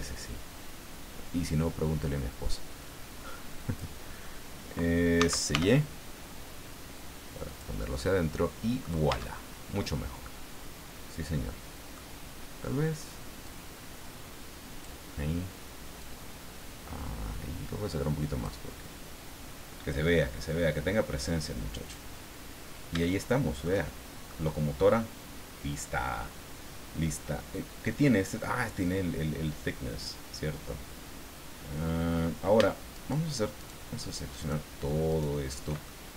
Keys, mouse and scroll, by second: 0.8 scroll down 2, 1.6 scroll down 2, 5.1 s, 5.5 y, 7.4 click, 7.9-9.0 middle drag, 9.1 Tab, 9.4-9.7 scroll down 1, 9.7-12.1 middle drag, 13.5-15.0 drag, 16.0-18.6 drag, 21.2 click, 22.2-22.5 scroll down 1, 23.0 shift+middle click, 23.9 shift+scroll down 1, 24.3 middle click, 32.9 shift+right click, 33.6 shift+right click, 34.4 shift+right click, 35.1 shift+right click, 35.8-36.1 shift+middle drag.